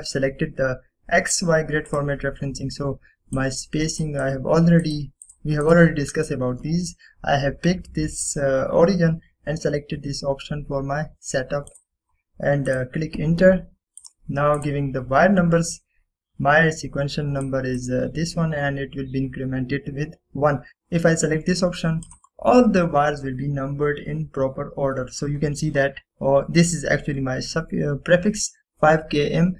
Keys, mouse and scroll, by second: 0.7 typing, 3.0 click, 3.0 typing, 12.8 click, 12.9 click, 18.6 click, 18.6-19.2 drag, 23.1 click, 26.8 scroll up 1.